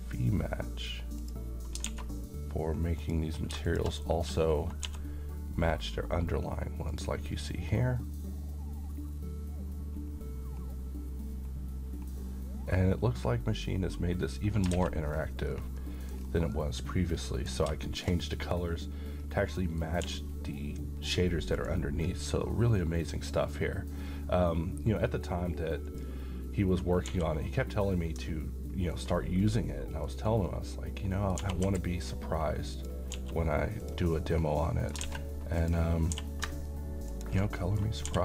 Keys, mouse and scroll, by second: 1.8 a, 3.0 click, 4.8 d, 6.9 click, 9.0-10.0 scroll up 1, 10.0-14.3 scroll down 1, 14.3 click, 14.7 alt+a, 15.1-15.5 scroll down 1, 15.8-16.4 middle click, 16.2 scroll down 1, 16.5-17.8 middle click, 17.5 scroll down 1, 17.9 shift+middle click, 19.2-19.5 scroll down 1, 19.5 middle click, 20.0 d, 21.5 click, 25.8 click, 27.0 g, 28.9 ctrl+click, 29.7-30.3 middle drag, 31.4 g, 31.6 y, 32.7 click, 33.1 s, 33.8 click, 34.2-35.1 middle click, 35.1 a, 35.6 click, 36.1 g, 37.1 ctrl+click, 37.6 middle click, 38.1 g.